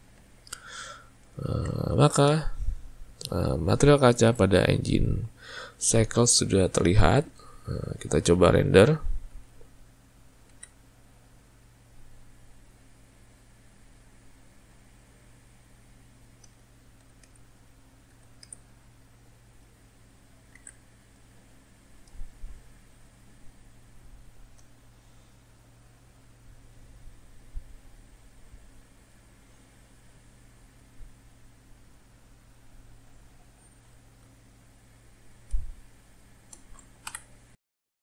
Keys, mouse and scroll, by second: 8.8-10.6 shift+middle drag, 10.6 alt+a, 15.3-16.7 shift+middle drag, 16.7 click, 17.1 s, 20.7 alt+a, 22.7-29.6 shift+middle drag, 31.1-34.1 shift+middle drag, 35.9-37.4 shift+middle drag.